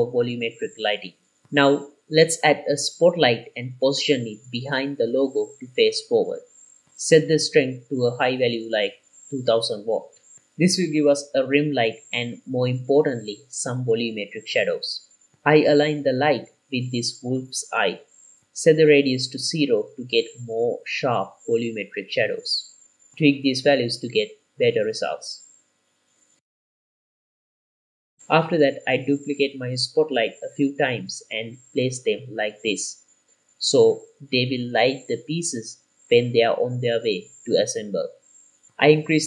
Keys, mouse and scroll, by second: 1.3 ctrl+s, 1.3 middle click, 1.5 shift+a, 2.8 r, 2.9 x, 3.3 KP_Subtract, 3.5 KP_9, 3.6 KP_0, 3.9 click, 4.9 g, 5.0 y, 5.7 click, 7.1 click, 7.9-10.6 drag, 9.7 KP_0, 13.6 KP_1, 14.5-15.2 scroll up 3, 15.4-16.0 shift+middle drag, 16.2-16.7 scroll up 2, 16.9 g, 18.4 click, 19.0-20.5 drag, 22.0-23.4 drag, 23.6 click, 25.6 middle click, 25.9-26.6 scroll down 7, 26.3 click, 27.0-28.1 drag, 28.1-32.9 typing, 28.8 click, 29.4 click, 29.7 click, 30.0 click, 30.3 click, 31.5 click, 31.8 click, 31.9 click, 32.8 click, 33.3 click, 33.6 middle click, 33.9 click, 34.8 shift+middle click, 35.1 KP_7, 35.4 g, 35.6 click, 35.6 middle click, 35.7 KP_1, 36.1 g, 36.6-38.1 drag, 38.8 g, 38.9 z.